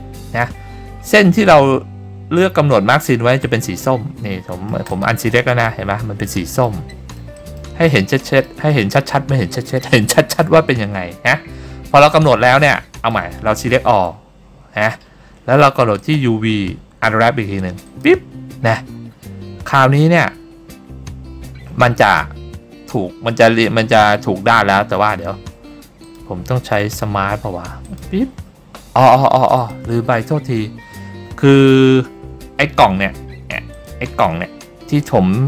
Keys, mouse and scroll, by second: 3.6 click, 4.5 middle click, 5.0 click, 5.5 middle click, 6.4 middle click, 7.0 middle click, 7.5 middle click, 8.0 middle click, 9.0 middle click, 11.4 scroll up 1, 12.2 scroll up 1, 12.3 scroll down 2, 12.7 middle click, 14.1 a, 16.1-18.2 drag, 26.2-29.8 drag, 33.9 click.